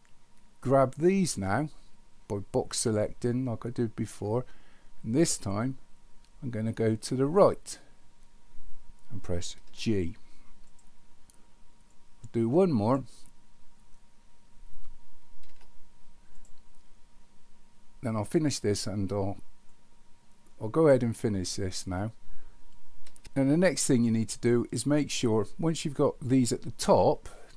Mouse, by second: 12.1 click, 19.7-20.9 drag.